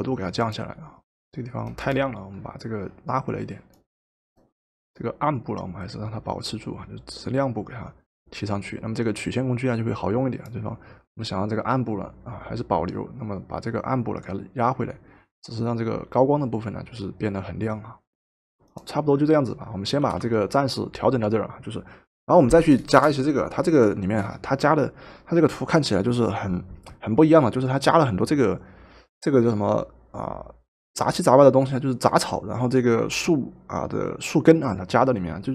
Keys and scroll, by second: 20.1 v.